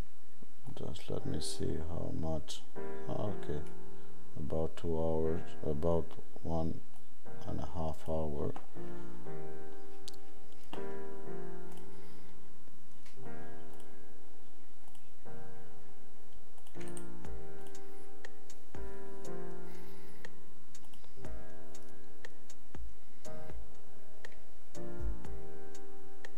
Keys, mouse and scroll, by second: 21.0 click.